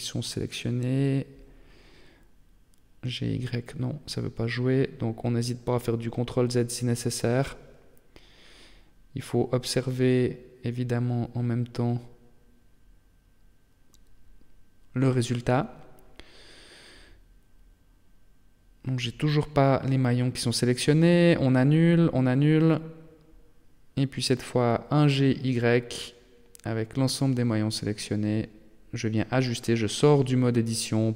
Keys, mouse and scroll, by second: 2.3 g, 4.7 Tab, 5.4 Tab, 6.2 g, 8.9 Tab, 10.6 KP_3, 11.3 scroll down 1, 11.4-12.0 scroll up 3, 12.8 t, 13.8 shift+middle click, 14.6 Tab, 15.5 g, 17.9 middle click, 19.7 ctrl+z, 20.1 ctrl+z, 20.7 ctrl+z, 21.2 ctrl+z, 21.5 ctrl+z, 21.9 ctrl+z, 23.7 g, 26.7 Tab, 27.2 Tab, 27.9 g, 29.8 Tab, 30.5 Tab.